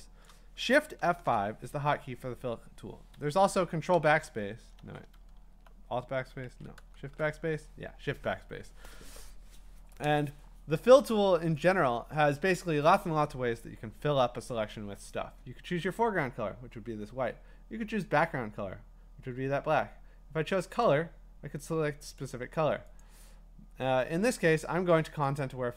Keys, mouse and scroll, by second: 0.4 click, 1.0 F5, 3.1 Escape, 3.9 ctrl+BackSpace, 4.8 ctrl+z, 5.3 alt+BackSpace, 6.5 ctrl+z, 6.9 BackSpace, 11.8-14.7 drag, 20.9 click, 22.2 click, 23.0 click, 25.4 click.